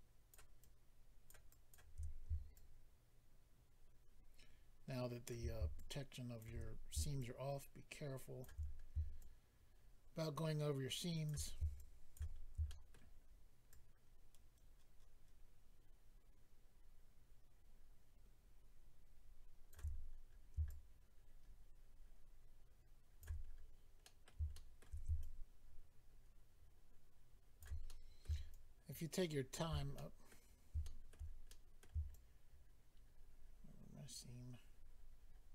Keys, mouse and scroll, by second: 0.6 shift+click, 1.5 shift+click, 2.0-2.5 scroll up 3, 2.5 shift+click, 5.7 shift+click, 6.6 scroll up 3, 7.2 shift+click, 8.6-9.2 scroll down 3, 9.2 shift+click, 11.8 shift+click, 12.3-12.7 scroll down 1, 12.7 shift+middle click, 13.2 shift+scroll up 1, 13.7 shift+click, 19.9-20.6 scroll up 5, 20.6 shift+click, 23.4-24.0 scroll down 3, 24.0 middle click, 24.0 scroll down 1, 24.5 shift+middle click, 24.9 middle click, 25.2 shift+click, 27.8 middle click, 28.5 shift+click, 29.9 middle click, 30.8 shift+middle click, 31.1 middle click, 31.5 middle click, 32.1 shift+click.